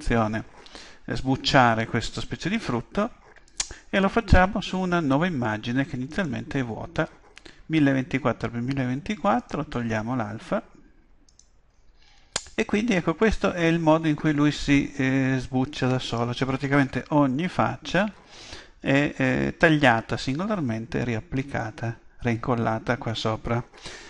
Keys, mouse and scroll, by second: 3.5-5.4 drag, 12.0-24.0 middle drag, 12.0-14.0 scroll down 1, 14.0-14.8 scroll down 1, 14.8-18.9 scroll down 1, 18.9-20.6 scroll down 1, 20.6-24.0 scroll down 1.